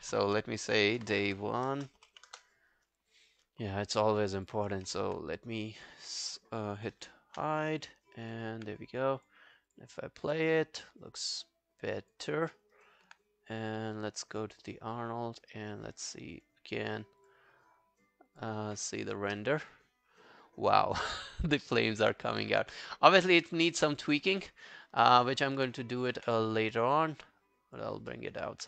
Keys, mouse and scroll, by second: 0.8-2.8 typing, 7.0 ctrl+h, 8.2 alt+right click, 9.7 double click, 12.5 alt+middle click, 12.8 alt+right click, 16.4 double click, 25.1 alt+middle click, 25.3 alt+right click, 26.2 w, 28.1 alt+middle click, 28.4 alt+right click.